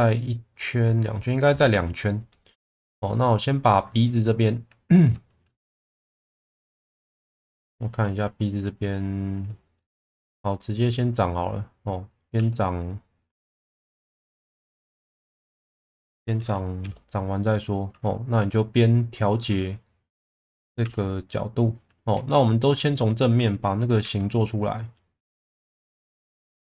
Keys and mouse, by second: 1.9-2.3 middle drag, 2.6 2, 3.2 click, 4.1 middle click, 5.4-5.8 shift+middle drag, 7.5 shift+middle click, 9.6 shift+middle drag, 10.1 e, 12.0 click, 12.3 e, 14.0 click, 14.8 shift+middle drag, 16.8 r, 17.8 click, 18.6-19.2 drag, 19.3 1, 19.9 click, 20.8 r, 21.6 click, 22.9 shift+middle drag, 24.0 2, 26.0 e.